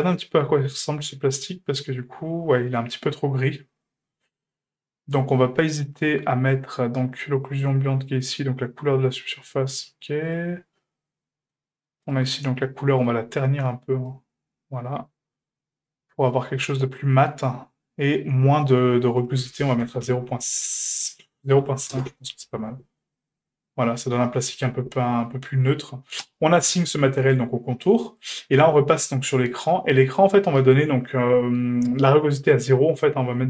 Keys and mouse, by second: 19.2-22.4 drag, 26.2 click, 28.2 click, 32.4 click.